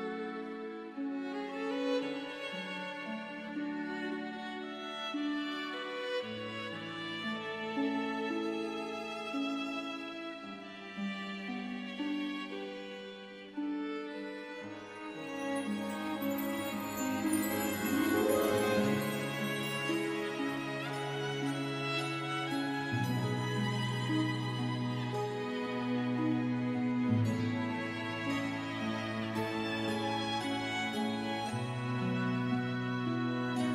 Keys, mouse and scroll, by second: 1.4 KP_2, 2.5 KP_Enter, 3.7 click, 4.7 KP_1, 5.2 KP_0, 5.2 KP_Enter, 8.7 click, 14.1 click, 18.8 click, 21.5 click, 28.3 F3, 29.2 click.